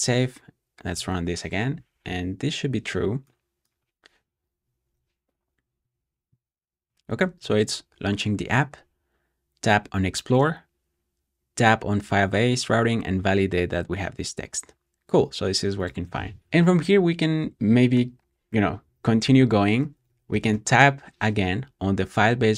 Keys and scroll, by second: 0.8 Return, 16.4 Escape, 18.7-20.9 typing.